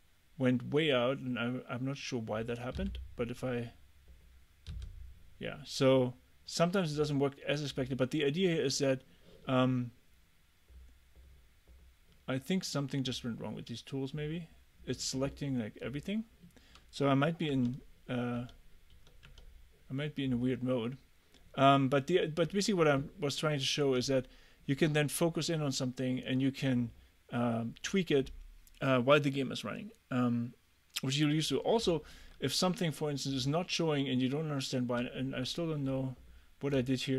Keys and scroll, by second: 2.8 f, 4.8 f, 17.6 Escape, 19.1 Escape, 22.5 Escape.